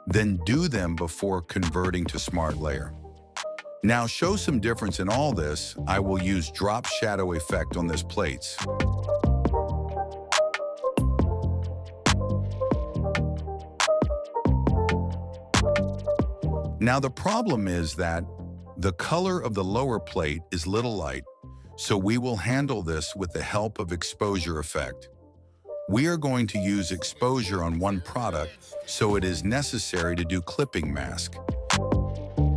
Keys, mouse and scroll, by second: 0.4 right click, 2.3 click, 3.4 click, 4.8 click, 6.1 click, 9.1 click, 9.5 click, 9.7 click, 10.3 click, 10.5 click, 11.9 click, 12.6 click, 13.0 drag, 13.2 click, 13.8-14.5 drag, 14.6 click, 15.1-15.7 drag, 16.0 click, 17.4 click, 17.9 click, 19.5 click, 23.8 click, 25.1 click, 28.3 click, 30.5 click, 31.9-32.5 drag.